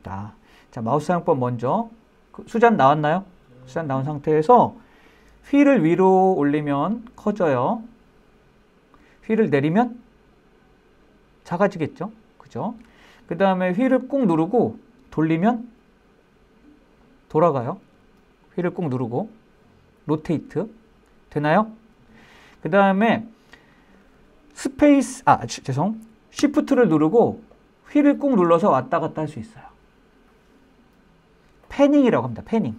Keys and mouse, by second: 14.4-24.1 middle drag, 27.9-32.7 shift+middle drag.